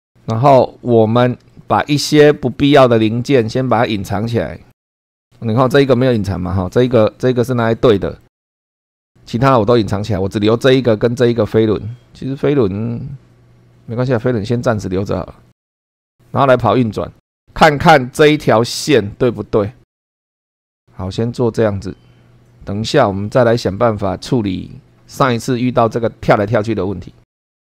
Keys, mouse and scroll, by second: 0.0 super+2, 0.5 scroll down 2, 1.5 shift+middle click, 2.3-3.0 shift+scroll down 2, 3.3 shift+middle click, 3.9 shift+middle click, 4.9 middle click, 7.4 middle click, 15.6 click, 15.7 click, 15.9 click, 27.4 click.